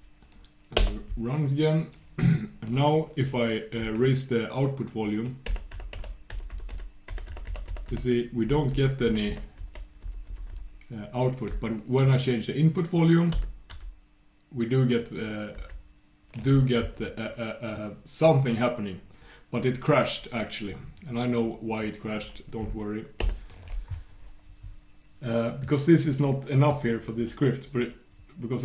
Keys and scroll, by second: 7.1 super+\, 7.9 super+\, 10.0 super+'.